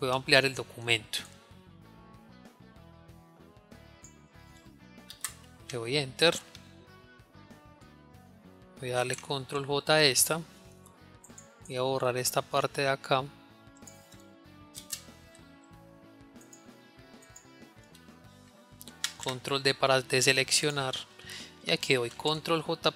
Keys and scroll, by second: 20.2 ctrl+d.